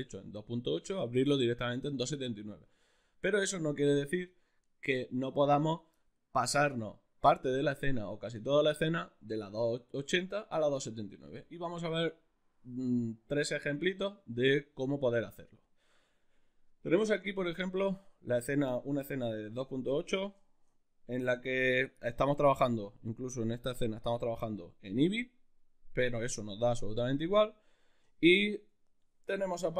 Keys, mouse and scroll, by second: 17.2-22.7 middle drag, 22.7 click, 23.6 click, 25.5-27.6 middle drag, 28.1 shift+middle drag, 28.7 ctrl+middle click.